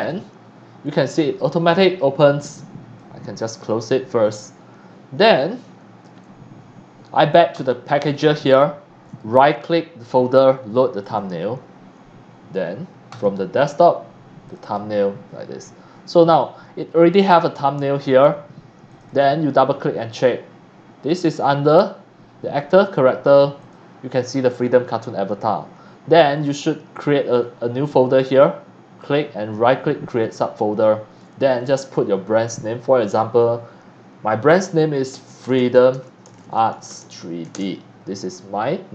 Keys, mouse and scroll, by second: 0.0 click, 0.8 click, 2.9 click, 7.5 click, 9.2 right click, 11.0 click, 13.1 click, 14.4 click, 14.6 click, 18.9 click, 23.6 click, 27.3 click, 28.2 click, 29.0 right click, 30.2 click, 31.5 click, 34.5-37.7 typing.